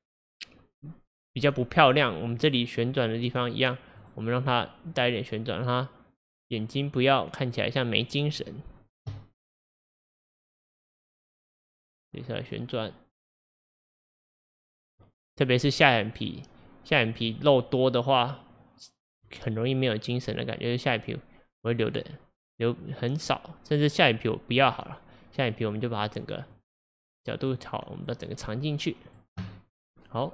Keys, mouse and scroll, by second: 2.4 click, 2.9 click, 3.4 click, 4.0 click, 5.0-11.6 drag, 12.3-16.3 drag, 17.2 click, 18.2-22.9 drag, 25.5 click, 26.5-30.3 drag.